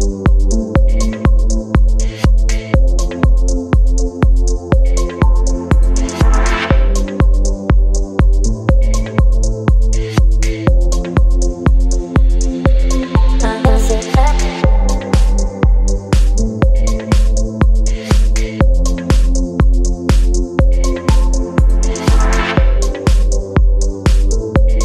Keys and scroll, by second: 3.8 space, 4.8 ctrl+t, 11.4 space, 15.8 space, 17.3 ctrl+j, 17.8 ctrl+t, 18.5 v, 18.8 ctrl+t, 20.9 space.